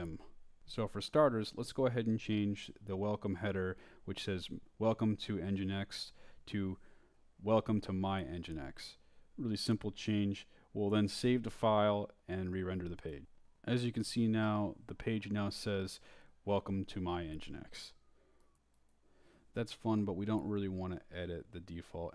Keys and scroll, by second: 0.1 Up, 1.1 Down, 1.4 Right, 3.4 space, 5.5 i, 6.8-7.7 typing, 8.9 Escape, 9.5-10.6 typing, 15.9 Return.